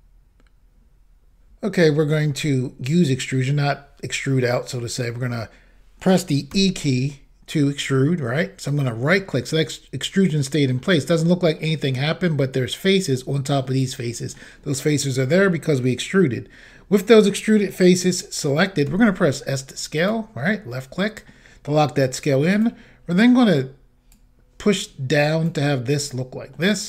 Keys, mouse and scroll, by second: 6.5 e, 8.7 right click, 10.2 middle click, 11.6 middle click, 13.7 middle click, 18.9 s, 20.0 click, 20.7 middle click, 22.6 click, 24.3 click, 26.1 middle click.